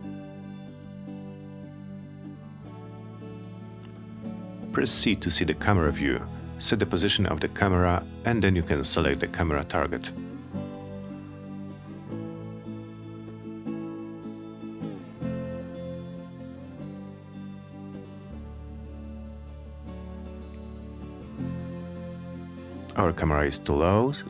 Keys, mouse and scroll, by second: 1.1 right click, 3.0 w, 5.2 click, 6.1 c, 9.7 click, 13.5-20.2 drag, 21.4 alt+middle click, 23.2-24.2 drag.